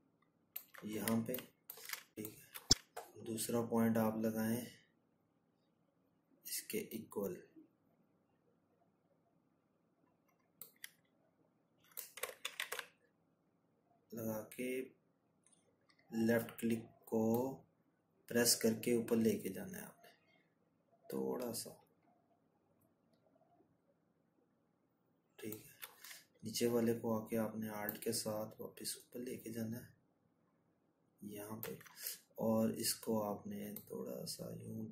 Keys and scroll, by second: 8.3 ctrl+z.